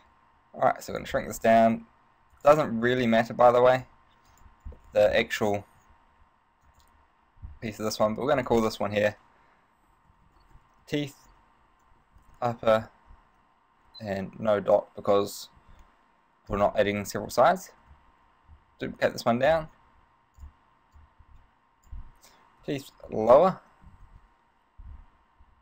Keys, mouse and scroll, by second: 1.4 click, 1.4 z, 1.6-2.0 scroll up 1, 2.6 right click, 3.1 click, 4.5 right click, 5.0 shift+middle click, 5.6 g, 7.0 click, 8.6 click, 18.0 shift+d, 19.7 click, 20.6 click.